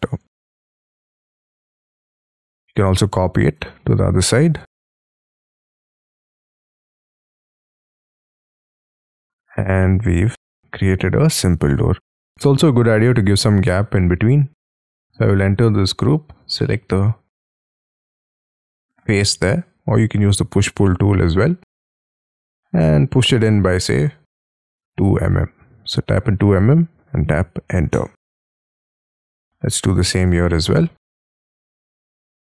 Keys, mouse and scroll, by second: 0.0-1.5 typing, 3.1-3.6 scroll up 2, 3.7 ctrl+click, 3.9-5.2 scroll up 1, 5.2 middle click, 6.1 shift+scroll down 4, 6.5 scroll up 1, 6.5 middle click, 7.7 shift+middle click, 8.0 shift+scroll down 3, 9.1 middle click, 9.7 middle click, 12.2-12.6 scroll up 5, 13.8-14.9 scroll down 11, 14.9 double click, 16.7 middle click, 20.0-20.9 scroll up 12, 20.9 space, 21.6-22.2 scroll up 8, 22.2 p, 24.6-25.8 typing, 27.9 Return, 28.5 space, 28.7 Escape, 28.9-29.3 scroll down 7, 29.3 middle click, 30.2 double click, 30.3 double click, 30.7 middle click, 31.2 scroll up 3, 31.4 p.